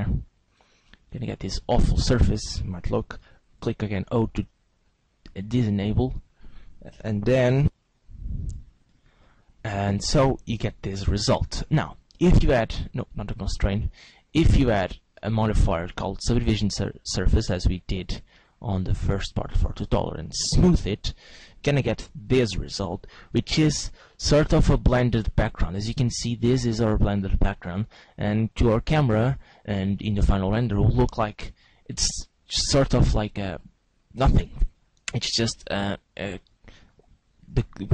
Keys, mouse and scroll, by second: 0.1 click, 3.3 o, 4.0 right click, 4.8 click, 10.5 Tab, 12.4 click, 13.7 click, 14.4 click, 15.1 click, 17.4 click, 17.9 click, 18.4 click, 20.5 click, 24.1 middle click, 29.3 middle click.